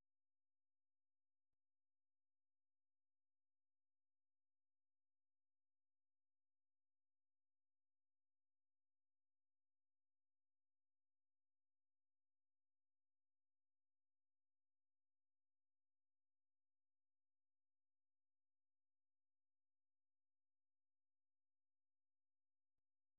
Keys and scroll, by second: 0.0 j, 0.3 j, 1.5-23.1 typing.